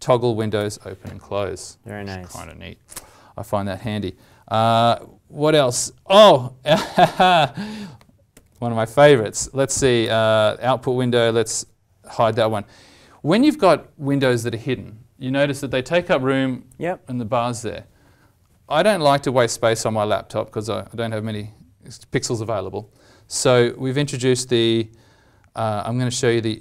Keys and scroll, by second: 8.3 alt+shift+Insert, 10.0 ctrl+alt+o.